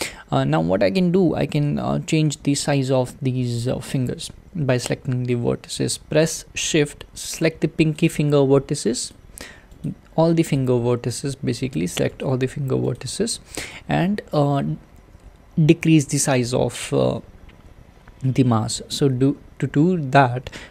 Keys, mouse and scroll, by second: 8.0 shift+click, 9.1 shift+click, 9.9 shift+click, 10.6 shift+click, 11.2 shift+click, 11.8 shift+click, 12.2 shift+click, 13.0 shift+click, 13.7 shift+click.